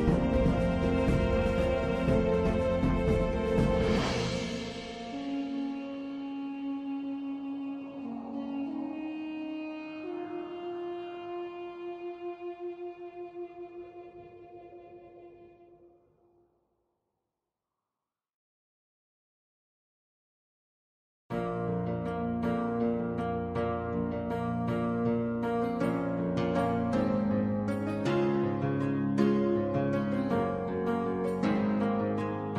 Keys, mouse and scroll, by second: 1.0-2.4 alt+drag, 3.5-5.1 alt+drag, 6.0-6.9 alt+drag, 8.8 1, 12.4 4, 13.6 Tab, 14.7 Tab, 19.9 1, 20.8 w, 22.5 e, 25.8 w, 26.3-26.7 drag, 27.1 e, 28.0-28.5 drag, 28.7 r, 29.7 click, 31.1 d.